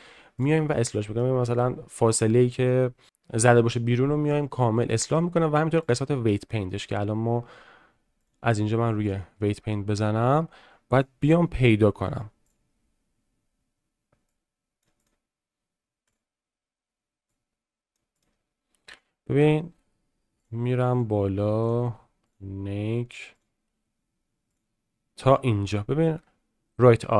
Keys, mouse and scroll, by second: 0.7-1.2 middle drag, 4.9 middle drag, 5.8 click, 6.3-6.7 shift+middle drag, 8.3-9.2 drag, 9.7 shift+middle click, 10.9 click, 12.5 click, 14.2-14.9 drag, 15.0 click, 17.2-18.0 drag, 18.2 click, 20.4 click.